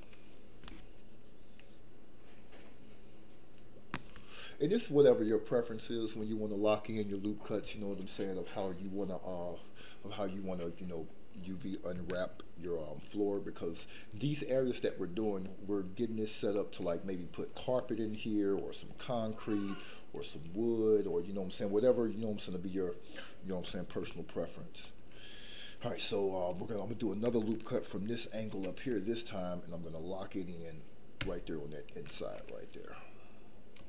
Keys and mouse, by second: 14.4 middle click, 16.6 middle click, 24.2 shift+middle click, 24.5 shift+click, 28.3 ctrl+r, 31.8 ctrl+click, 32.4-33.8 middle drag.